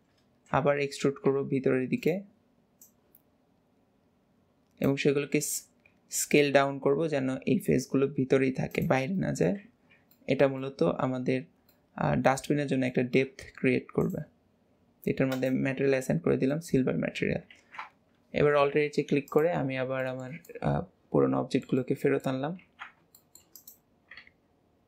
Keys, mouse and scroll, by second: 2.9 click, 9.3 middle click, 10.2-10.8 middle drag, 11.8-14.1 middle drag, 14.1-16.0 drag, 16.6-18.3 middle drag, 18.3 alt+h, 18.4-19.4 scroll down 4, 19.4 click, 19.8-20.1 scroll down 1, 20.1 shift+middle click, 20.6-22.7 middle drag, 22.7 ctrl+s, 23.2 shift+middle click, 23.6 click.